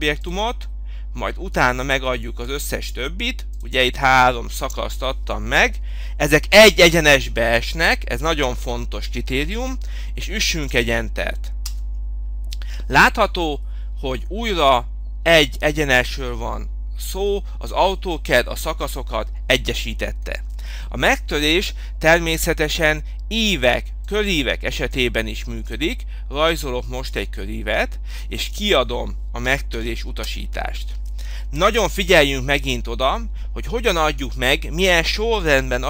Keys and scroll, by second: 11.9 Return, 21.0 Escape, 29.4 m, 30.5 Return.